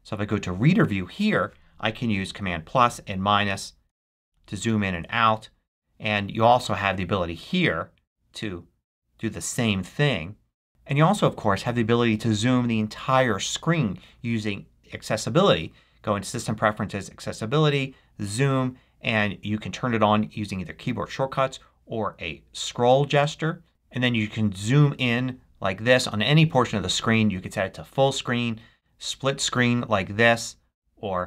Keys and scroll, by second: 2.2 super+=, 3.4 super+-, 4.2 super+=.